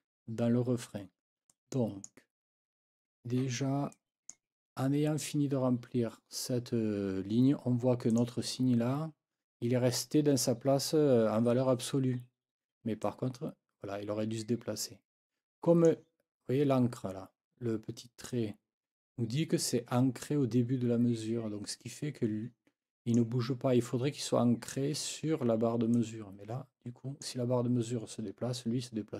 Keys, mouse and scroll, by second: 1.5-2.2 scroll up 2, 3.9 click, 8.1 click, 13.0-16.0 drag, 16.9-23.3 drag, 25.9-27.4 drag.